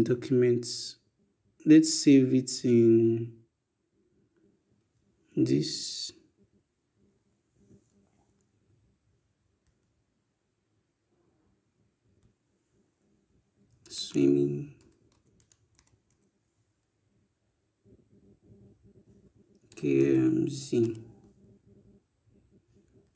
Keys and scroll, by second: 12.8-15.7 typing, 18.8 k, 19.1 m, 19.9 z.